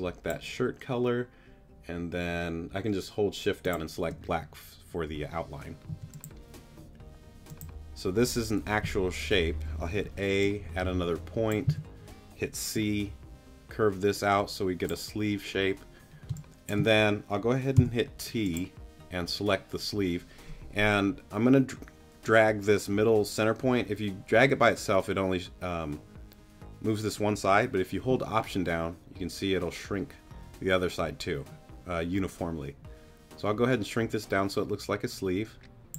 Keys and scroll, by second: 5.9 t, 8.8 a, 9.9 a, 11.7 c, 16.3 space, 17.7 t.